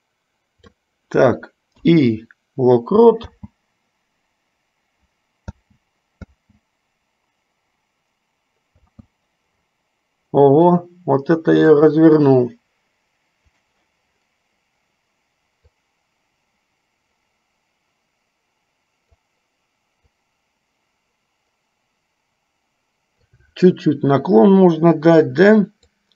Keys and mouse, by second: 12.0 click, 13.6 click, 15.7-19.6 drag, 20.3 click, 20.6-23.7 drag.